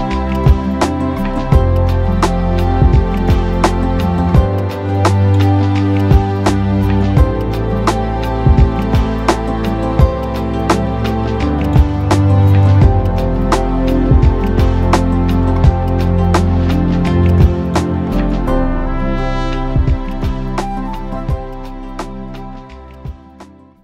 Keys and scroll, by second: 8.3 Delete, 9.4 Delete, 10.9 Delete.